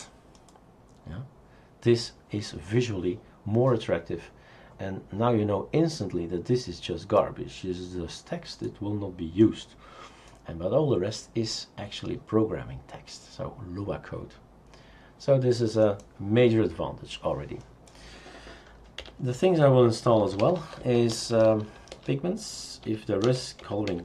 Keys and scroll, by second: 19.0 Delete, 20.0-21.7 typing, 22.9-24.0 typing.